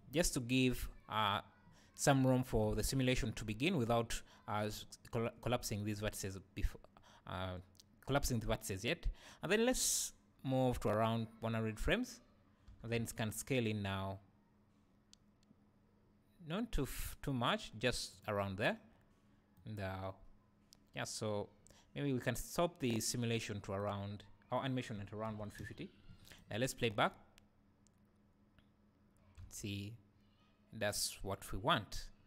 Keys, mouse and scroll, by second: 8.8-18.2 right drag, 12.7 s, 18.2 click, 19.6-24.6 right drag, 24.6-26.3 drag, 26.9 space, 29.6 a.